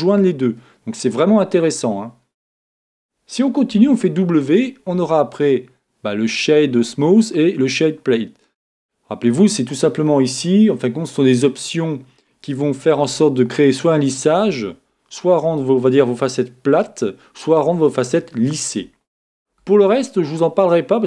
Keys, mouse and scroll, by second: 0.1 middle click, 0.6-2.3 middle drag, 3.7 w, 12.6-14.4 middle drag, 19.6 w.